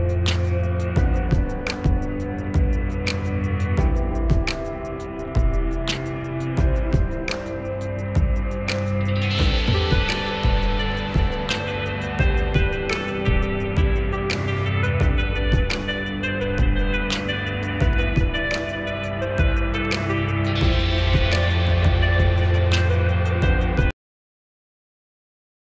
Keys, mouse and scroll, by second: 0.7 shift+Page_Up, 1.9-3.9 drag, 3.9 shift+Page_Up, 5.0-7.6 drag, 7.6 shift+Page_Up, 8.4-12.2 drag, 12.2 shift+Page_Up, 12.9 click, 15.0-20.6 drag, 20.6 shift+Page_Up, 21.6 click, 22.6 Delete, 23.4 click, 24.2 Delete, 24.7-25.4 scroll down 1, 25.4 F2, 25.7 click.